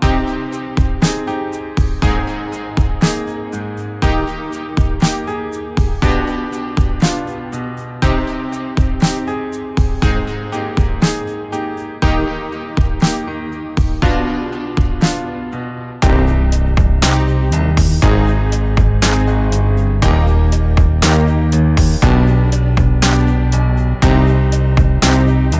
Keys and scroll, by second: 6.1 ctrl+z.